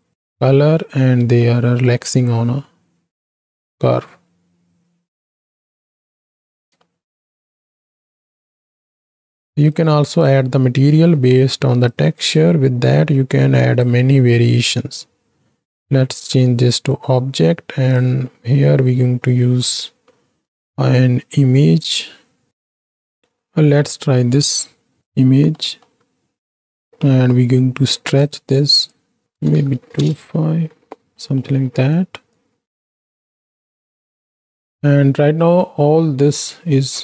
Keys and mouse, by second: 1.5-1.9 drag, 6.7 space, 6.9-8.2 drag, 8.7 KP_7, 9.0 x, 9.1-9.4 right drag, 10.1 click, 11.1 ctrl+t, 12.0-13.9 right drag, 14.9-16.0 drag, 16.1 middle click, 27.9 click, 29.2 click, 31.3 middle click, 32.3-34.3 drag, 34.8-35.6 middle drag.